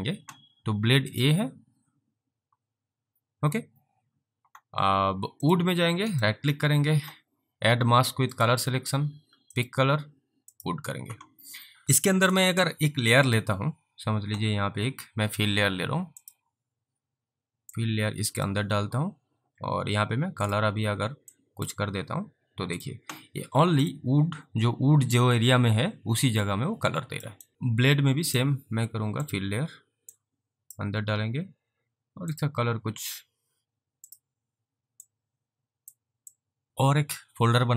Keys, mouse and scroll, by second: 1.0 click, 5.5 click, 6.2 right click, 8.4 click, 13.3 click, 16.2 click, 17.8 click, 20.5 click, 21.4 click, 22.8 click, 26.5 alt+click, 27.5 click, 30.2 click, 32.2 click, 34.0 click, 35.1 click, 36.5 click, 36.7 click.